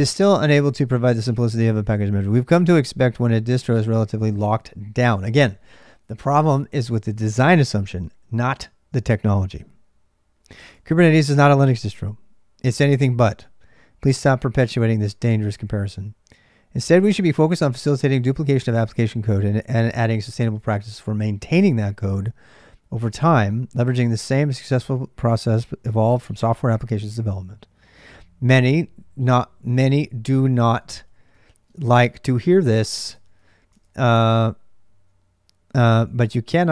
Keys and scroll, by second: 0.0-36.7 typing, 33.0 ctrl+].